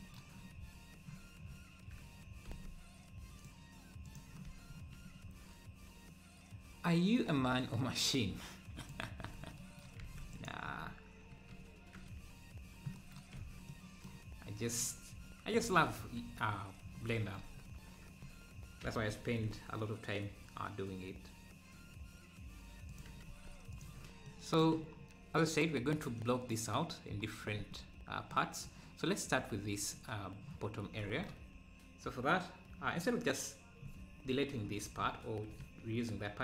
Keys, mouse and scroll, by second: 4.2-9.3 drag, 9.3-9.6 scroll up 2, 10.5 click, 10.8-11.2 scroll down 3, 11.3 KP_Decimal, 11.8-12.2 scroll down 1, 14.8 scroll up 4, 16.2 scroll down 2, 17.6 KP_Decimal, 18.8 s, 23.8 ctrl+a, 25.0-25.6 scroll down 1, 34.5 shift+s.